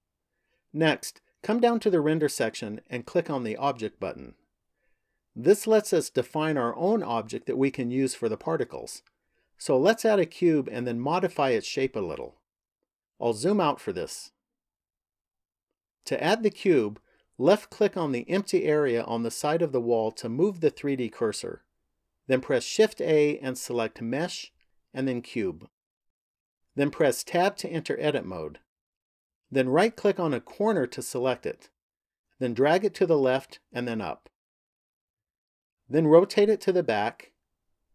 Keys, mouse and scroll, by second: 1.1 click, 5.2 click, 12.9-17.1 scroll down 7, 17.5 click, 22.7 shift+a, 27.0 Tab, 29.5 right click, 31.6 click, 33.3 click, 35.3 middle click.